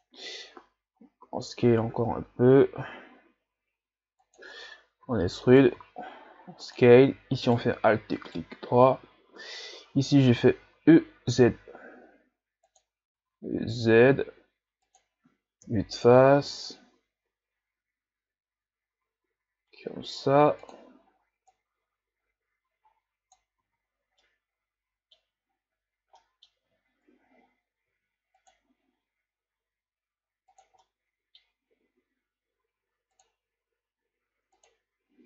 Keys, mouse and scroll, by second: 1.2 s, 5.0 e, 7.4 alt+right click, 8.2 alt+right click, 10.4 e, 13.0 e, 15.6 KP_1, 16.1 z, 16.9 s, 21.5-23.7 drag, 23.7 z, 24.0 scroll down 2, 24.2-25.5 middle drag, 25.5-26.1 scroll up 3, 26.2 scroll up 1, 26.2-27.9 middle drag, 27.9 ctrl+r, 30.8-32.0 middle drag, 32.0 ctrl+r.